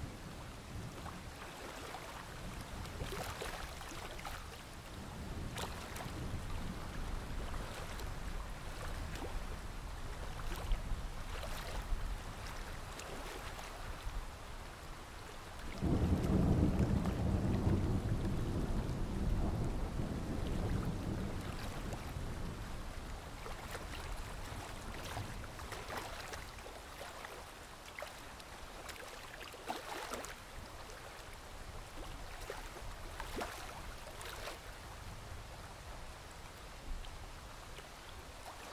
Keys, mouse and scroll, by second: 3.1-3.9 alt+scroll down 2, 3.9 click, 4.1 alt+scroll up 1, 4.4 click, 5.3 shift+click, 6.1 Delete, 6.6 alt+scroll down 1, 6.9 click, 7.0-8.5 scroll up 2, 8.5 click, 8.7-9.5 alt+scroll up 1, 9.5-18.4 drag, 18.5 ctrl+z, 18.9 ctrl+z, 19.4-23.1 drag, 23.1-23.4 alt+scroll down 1, 23.5-25.2 alt+scroll up 1, 25.2-27.2 drag, 28.3 alt+scroll down 1, 28.7-29.1 alt+scroll up 1, 29.1 click, 30.9 ctrl+g, 31.2 scroll down 1, 31.5 scroll up 1, 32.1 alt+click, 33.8-38.4 drag, 35.9 Delete.